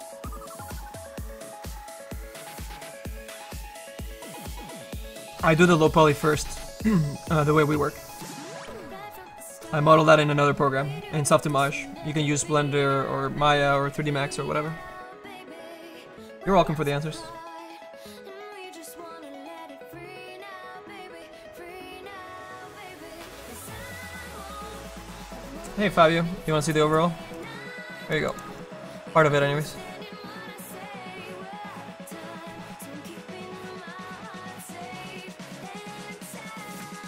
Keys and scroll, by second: 27.8 space.